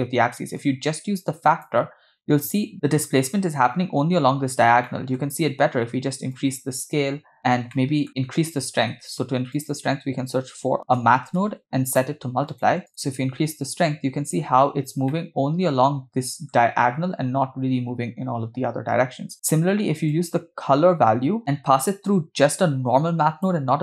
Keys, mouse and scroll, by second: 0.6-1.7 drag, 4.8 middle click, 5.2-5.5 scroll up 3, 6.3-7.3 shift+drag, 7.7 middle click, 9.0 shift+a, 13.0-14.4 drag, 14.9 scroll down 2, 15.1-16.5 middle drag, 20.1-21.4 drag, 22.1-23.5 drag.